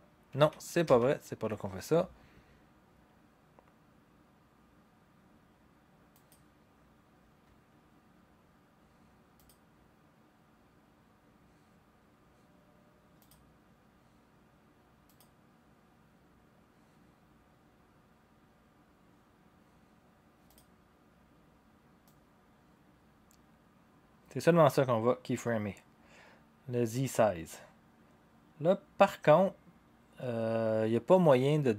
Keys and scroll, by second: 0.3 ctrl+z, 0.8 ctrl+z.